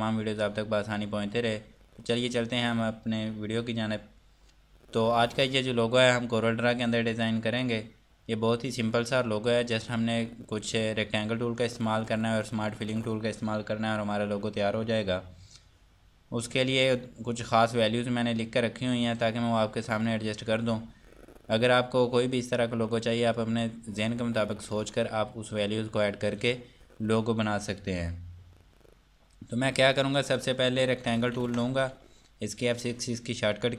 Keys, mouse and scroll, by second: 2.1 click, 16.9-18.2 scroll down 1, 18.2 scroll up 1, 19.0 scroll down 1, 20.2-21.3 scroll up 1, 31.2 ctrl+Num_Lock, 31.4 4.